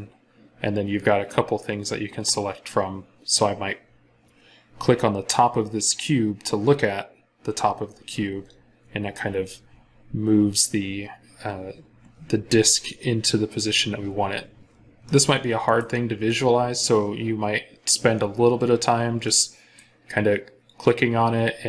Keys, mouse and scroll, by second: 14.7 scroll up 1, 14.9 middle click.